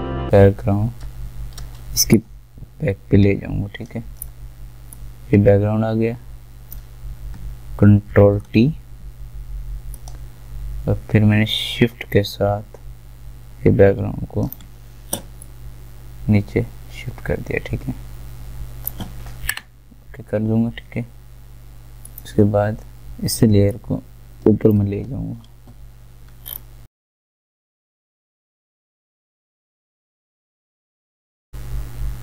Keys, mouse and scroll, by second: 0.0-8.1 drag, 8.1 ctrl+t, 10.0-21.5 shift+drag, 22.0-26.5 drag, 26.5 alt+scroll up 1, 26.8 ctrl+shift+a, 27.3 click, 28.2-31.5 drag.